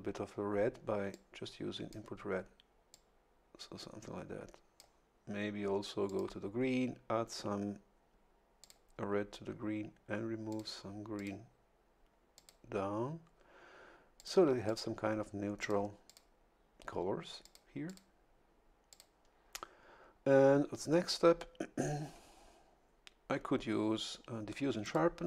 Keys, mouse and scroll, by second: 1.1 click, 2.9-5.0 drag, 6.1 click, 8.6 click, 10.5 click, 11.2 click, 12.3 click, 14.2 click, 14.6 click, 15.6 click, 16.1 click, 17.4 click, 17.9 click, 18.9 click, 24.8 click.